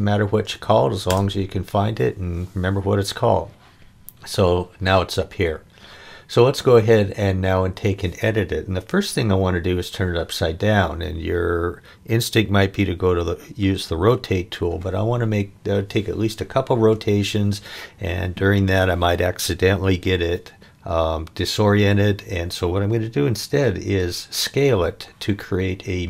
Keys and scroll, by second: 1.1 Return.